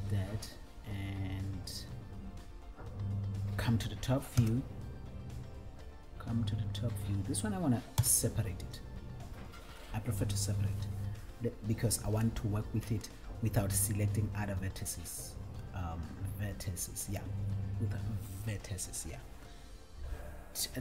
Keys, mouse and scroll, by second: 4.5 KP_7, 8.2 KP_1.